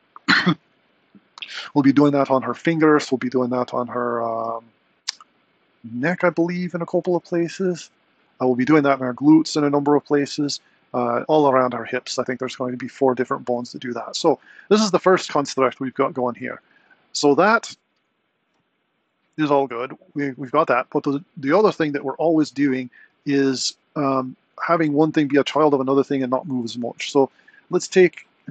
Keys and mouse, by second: 7.1 r, 18.1 click.